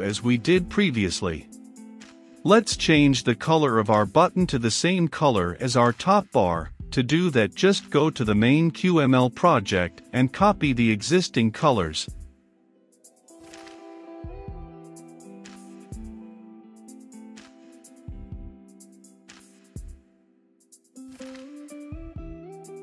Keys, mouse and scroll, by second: 9.6-10.7 middle drag, 10.7-13.3 drag, 13.3-14.4 middle drag, 14.4-20.4 drag, 20.4 right click, 21.2-22.8 drag.